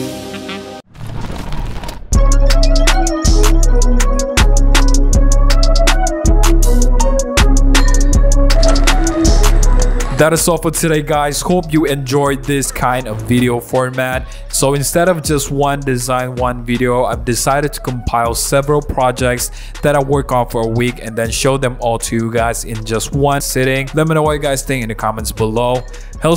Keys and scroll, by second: 0.0-0.7 typing.